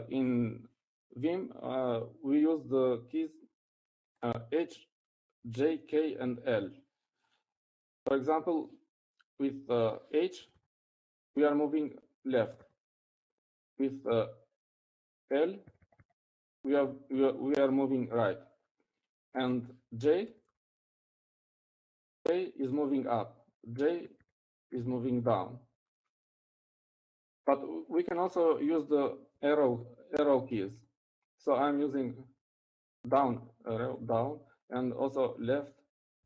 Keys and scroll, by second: 0.0-0.6 typing, 14.4-15.7 typing, 18.6-19.1 typing, 23.2 typing, 24.4-25.6 typing, 26.7-27.4 typing, 32.4 Up, 32.6 Up, 33.7 Up, 34.7 Down, 36.1 Down.